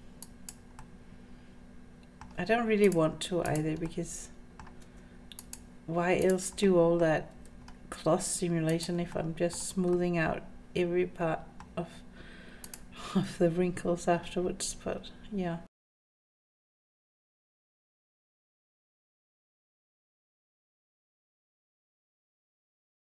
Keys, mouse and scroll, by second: 0.8-2.2 middle drag, 2.9 click, 3.5 click, 3.9 middle click, 4.8 g, 6.2 click, 6.7 middle click, 7.3 g, 9.1 scroll up 1, 9.2 middle click, 10.0-11.7 middle drag, 12.1-12.7 scroll up 3, 12.7 click, 13.2 g, 15.9 scroll down 2, 15.9 shift+middle click, 16.1 middle click, 16.3 click, 16.3 middle click, 16.7 click, 16.8-20.9 typing, 17.2 scroll down 4, 17.2 middle click, 17.4 scroll up 3, 17.5 click, 17.8 scroll down 2, 17.8 middle click, 18.5 middle click, 18.7 click, 18.7 middle click, 19.5 click, 19.8 middle click, 20.1 scroll up 3, 20.2 click, 20.6 middle click, 20.8 click, 21.2 click, 21.4 middle click, 21.6 shift+middle click, 21.8 middle click, 21.9 click, 22.0 g, 22.5 click, 22.6 g, 22.8 middle click.